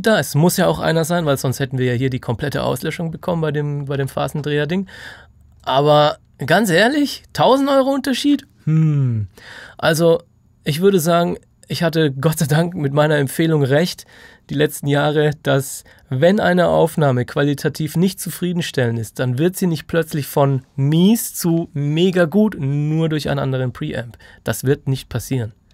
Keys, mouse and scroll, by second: 1.1 F3, 3.9 F3, 5.5 click.